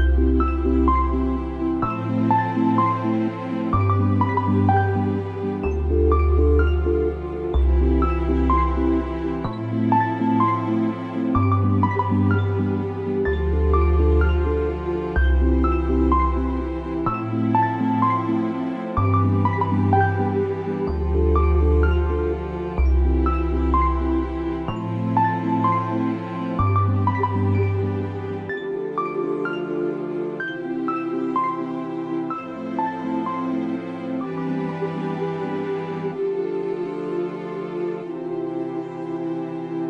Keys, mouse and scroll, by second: 0.3 right click, 0.5 right click, 1.7 click, 3.8 ctrl+t, 4.5 right click, 6.1 click, 6.8 alt+scroll up 1, 9.3-12.1 drag, 12.1 space, 12.5 click, 13.2 space, 13.2 click, 13.3 space, 14.9-20.2 drag, 20.2 space, 20.4 click, 21.2 space, 22.0 click, 22.1 space, 23.3-27.1 drag, 27.1 space, 27.4 click, 28.2 space, 30.0-33.9 drag, 36.4 alt+scroll down 1, 37.1-37.4 scroll down 2, 38.9 click.